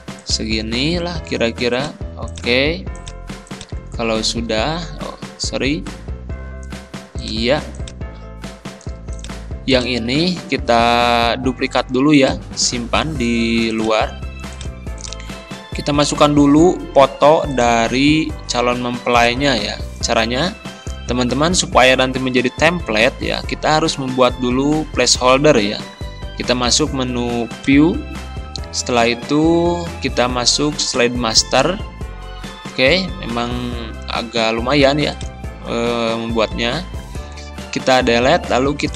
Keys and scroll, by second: 5.0 ctrl+z, 16.1 Delete, 36.5 Delete.